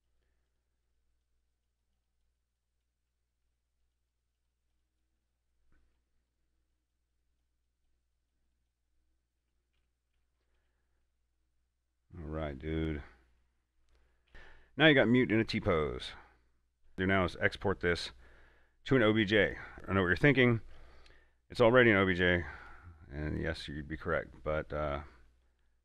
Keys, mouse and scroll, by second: 3.3 middle click, 3.3 middle click, 4.1 click, 5.4 middle click, 6.5 click, 9.7 a, 10.0 Tab, 10.8 a, 11.3-13.7 middle drag, 13.7 scroll down 1, 14.1 middle click, 14.3 a, 14.5-17.0 middle drag, 19.7 click, 22.9 click, 22.9 click.